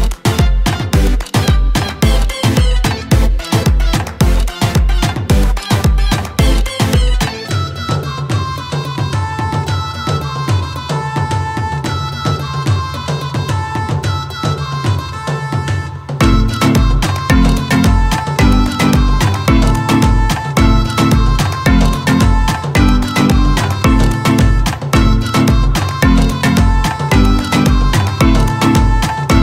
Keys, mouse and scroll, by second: 13.4 click, 20.3 click, 26.0 click.